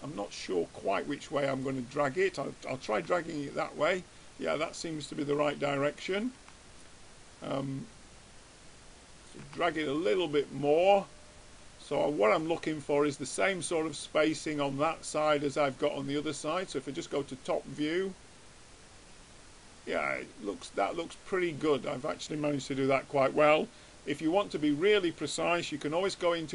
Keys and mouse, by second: 3.3 Tab, 6.6 Tab, 7.7-9.3 drag, 9.7 Tab, 14.2-16.4 middle drag, 16.7-18.5 drag, 26.3 Tab.